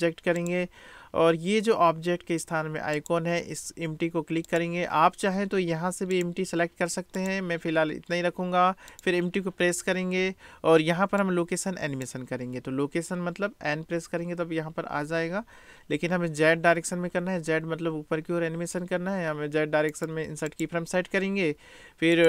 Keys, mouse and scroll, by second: 3.0 click, 6.2-7.3 drag, 8.9 click, 11.4 click, 11.7 right click, 11.9 click, 12.0 right click, 20.0-22.2 drag.